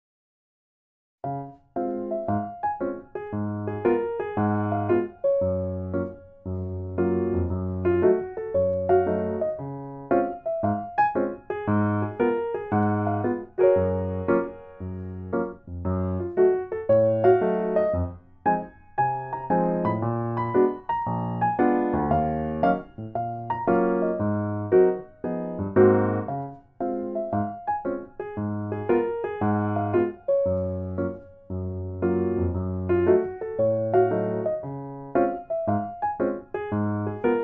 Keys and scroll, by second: 0.4 Tab, 2.9 8, 3.0 F2, 7.2 Tab, 8.7 ctrl+z, 9.0 8, 9.2 F2, 11.7 ctrl+z, 12.8 ctrl+z, 15.4 Tab, 17.3 8, 17.4 F2, 18.6 ctrl+z, 18.8 ctrl+z, 18.9 ctrl+z, 23.9 Tab, 27.3 F2, 27.7 ctrl+z, 28.2 8, 31.2 Tab, 32.4 Tab, 33.7 ctrl+z, 35.4 ctrl+z.